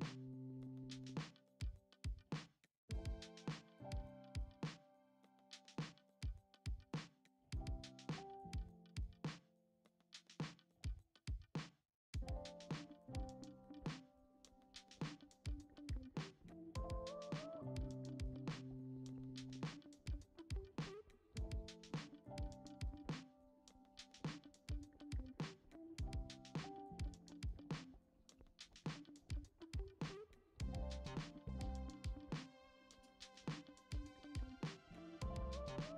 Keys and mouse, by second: 1.3 click, 1.8 x, 3.1 a, 3.3 s, 4.4 s, 5.9 KP_1, 6.9 shift+middle drag, 7.5 g, 8.6 middle click, 9.1 g, 10.3 shift+middle drag, 11.2-11.6 middle drag, 11.9 g, 13.6-15.1 drag, 15.5 g, 18.1 middle click, 19.1 middle click, 19.9 KP_1, 20.9 middle click, 21.9 g, 24.7-25.0 middle drag, 25.2 middle drag, 25.6 shift+middle click, 26.3 middle click, 26.6 g, 27.3 g, 28.7 middle drag, 29.0 g, 30.8-31.1 shift+middle drag, 31.8 shift+d, 34.5 KP_1, 35.6 shift+middle click.